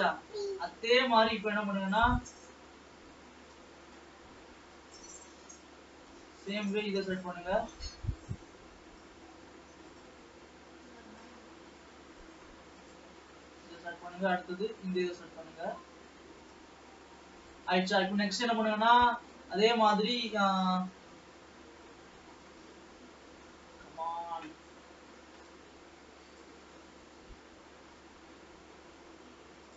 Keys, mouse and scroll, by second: 1.1-2.1 shift+middle drag, 2.1-2.7 scroll down 1, 2.7 scroll down 1, 2.9-4.4 middle drag, 4.4-5.0 scroll up 3, 5.0-6.4 shift+middle drag, 6.4-6.9 shift+scroll up 5, 7.9 shift+middle click, 8.7 scroll down 1, 9.1-10.2 middle drag, 10.2-11.0 scroll up 7, 11.0 shift+middle click, 11.9-12.7 scroll up 3, 12.7 scroll up 1, 12.8 shift+click, 13.6-15.3 middle drag, 15.3-15.9 scroll up 3, 15.9-17.5 middle drag, 17.5 shift+click, 18.1 scroll down 2, 18.4-24.7 shift+middle drag, 24.7-26.3 scroll up 6, 26.3 shift+click, 27.1-29.4 middle drag, 29.4-29.7 scroll down 2.